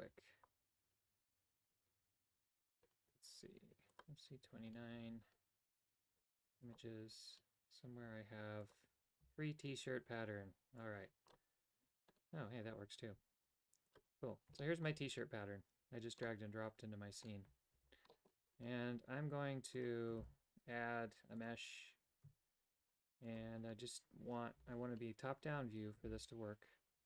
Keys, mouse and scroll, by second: 12.4 typing, 14.5 shift+middle click, 16.2-17.2 middle drag, 17.7 alt+g, 18.0 middle click, 19.7 click, 20.1 shift+a, 22.2 Tab, 24.5 KP_7, 26.0 shift+d.